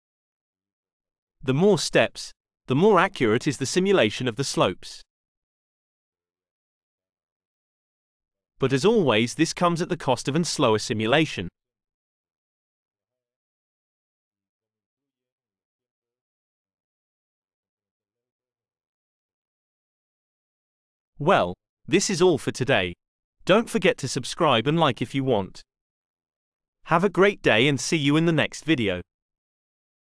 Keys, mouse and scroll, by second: 1.4 BackSpace, 2.7 5, 3.3 Return, 5.3 click, 5.7 click, 17.6-19.5 drag, 30.0 click.